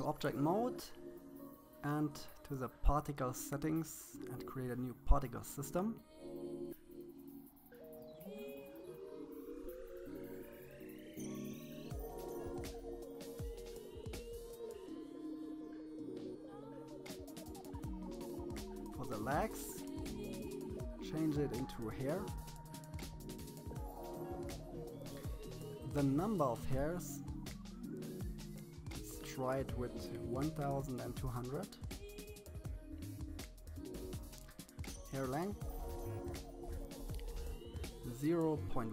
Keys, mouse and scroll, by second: 2.1 click, 3.7-6.3 drag, 17.0 click, 27.0 click, 28.0-29.1 drag, 29.1 0, 34.9-36.2 drag, 36.2 BackSpace, 36.3 BackSpace, 36.5 BackSpace.